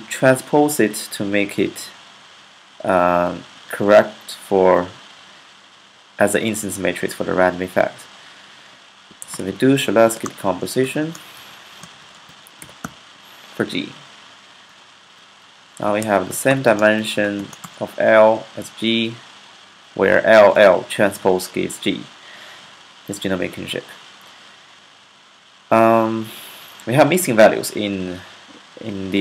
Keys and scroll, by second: 8.7-13.1 typing, 11.2 Left, 15.4-17.2 typing.